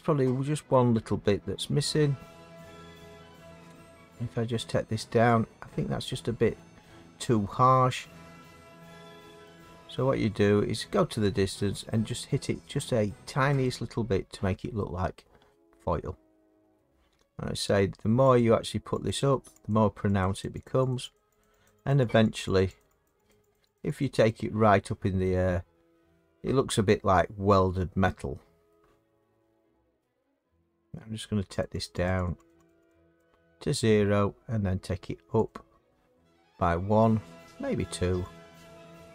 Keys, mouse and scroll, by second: 2.2 middle click, 6.5 click, 9.4 click, 10.0 middle click, 10.2 middle click, 10.4 middle click, 13.6 click, 16.7 middle click, 18.3 click, 19.0 click, 19.7 click, 20.2 click, 20.4 click, 20.6 click, 20.9 click, 21.1 click, 21.4 click, 21.6 click, 21.9 click, 22.1 click, 22.3 click, 22.6 click, 23.0 click, 23.3 click, 23.5 click, 23.7 click, 24.0 click, 24.2 click, 28.7 middle click, 31.6 click, 31.8 click, 32.0 click, 32.2 click, 32.5 click, 32.6 click, 32.9 click, 33.2 click, 35.4 click, 37.0 middle click, 38.3 click.